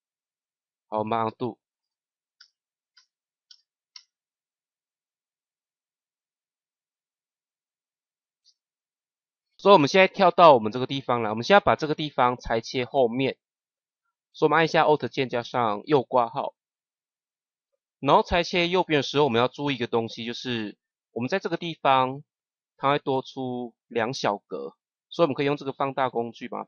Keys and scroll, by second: 1.1 ctrl+z, 3.0 ctrl+z, 8.3 [, 15.3 alt+].